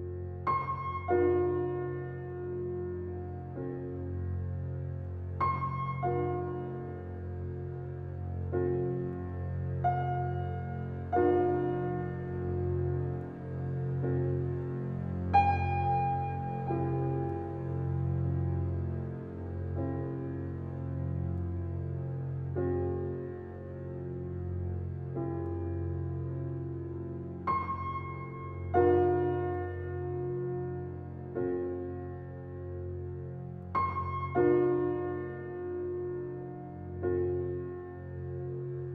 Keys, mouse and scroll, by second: 0.1 alt+middle click, 0.9 ctrl+space, 2.0 alt+right click, 3.2 alt+click, 4.3-7.4 alt+middle drag, 7.4-10.4 alt+drag, 10.4-20.2 alt+middle drag, 20.2 alt+click, 21.0-38.9 alt+middle drag.